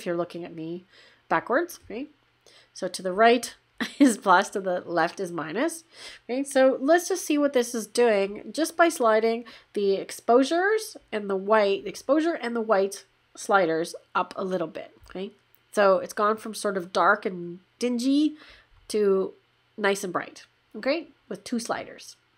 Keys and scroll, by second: 15.0 \.